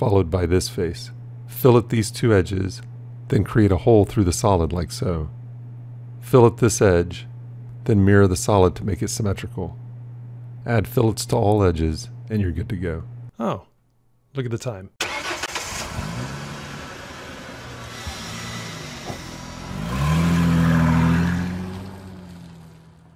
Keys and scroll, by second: 0.3 e, 7.9 alt+x.